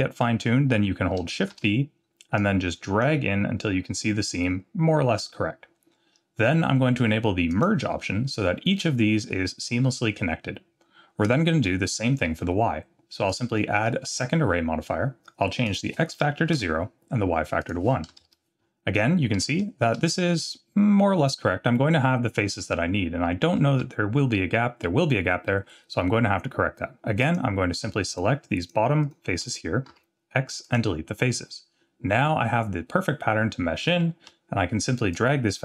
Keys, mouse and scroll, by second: 1.5 shift+b, 4.5 scroll down 1, 7.5 click, 8.0-8.7 scroll down 4, 9.5 scroll down 1, 13.3-14.2 drag, 15.6-17.4 drag, 17.6-18.8 drag, 19.6 shift+middle click, 23.6 z, 25.6-26.1 scroll down 1, 27.2 click, 28.1 shift+click, 28.6 shift+click, 29.0 shift+click, 29.9 x, 35.1-35.6 shift+drag.